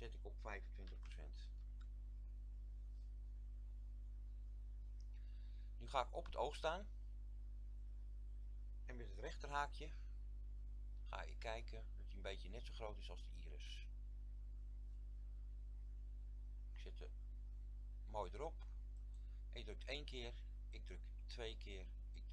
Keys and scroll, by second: 1.0 KP_2, 1.0 KP_5, 1.6 Return, 10.1 ], 11.0 [.